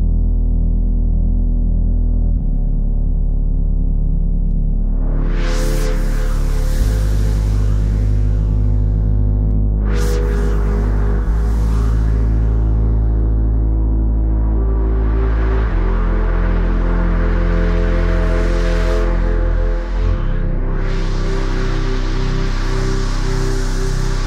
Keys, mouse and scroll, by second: 7.3-9.0 typing, 10.3 typing, 13.4-14.2 typing.